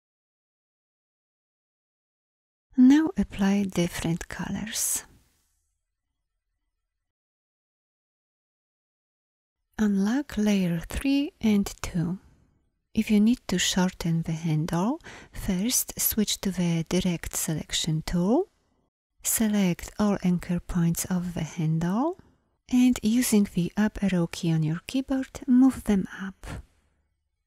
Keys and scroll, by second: 0.8 v, 16.6 a, 22.7 Up.